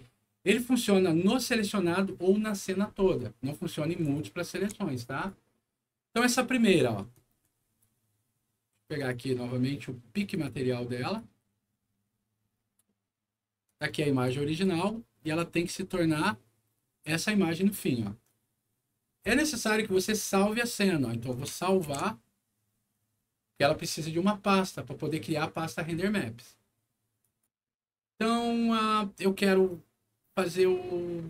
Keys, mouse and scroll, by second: 0.4 middle click, 1.2 click, 4.0 ctrl+click, 4.4 ctrl+click, 5.1 ctrl+click, 6.1 ctrl+click, 6.7 ctrl+middle click, 7.1-7.6 ctrl+scroll down 4, 8.9 click, 10.3 click, 11.0 click, 12.4 scroll up 2, 12.8 middle click, 13.6 click, 13.8 click, 14.2 click, 14.9 middle click, 15.5-15.9 scroll up 2, 16.2 middle click, 21.0 middle click, 21.8 ctrl+s, 27.2 click.